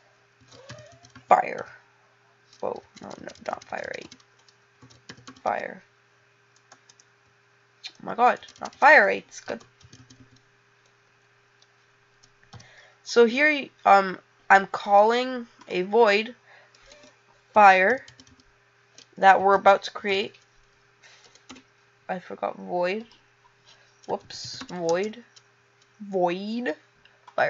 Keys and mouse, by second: 14.9 click, 15.5 click.